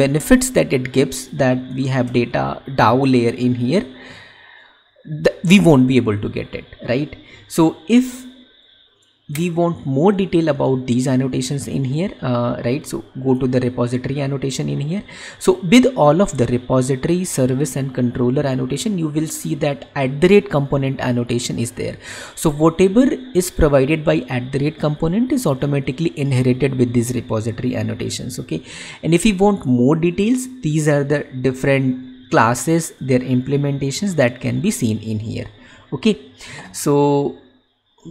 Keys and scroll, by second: 1.9 Up, 2.4 ctrl+/.